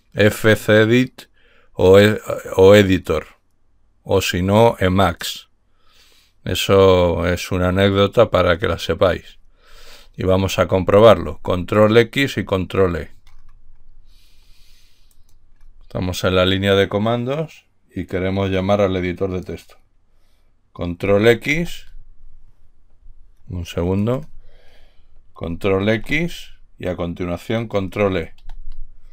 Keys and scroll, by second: 26.3 ctrl+x, 28.5 ctrl+e.